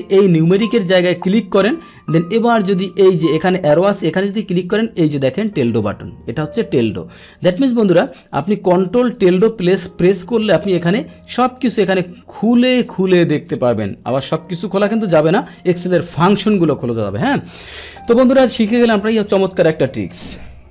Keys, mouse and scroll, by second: 1.2 click, 7.3 Escape, 8.0 click, 9.1 click, 10.7 click, 12.5 click, 12.7 click, 14.2-15.1 scroll down 1, 15.1 click, 16.4 click, 16.6 click.